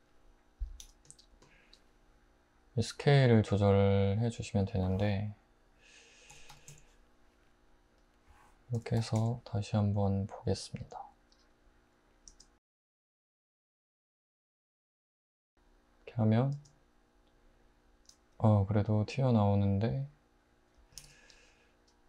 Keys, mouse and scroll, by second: 0.8 h, 6.3-6.7 typing, 8.8-9.2 typing, 12.3 space, 16.5 space, 21.0 alt+z.